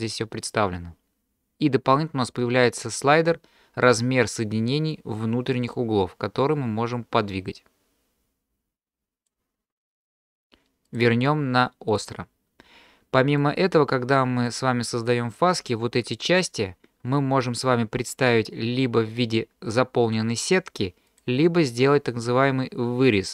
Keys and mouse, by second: 5.1-9.4 drag, 10.9-12.0 drag, 13.4-14.5 middle drag, 21.1-23.3 drag.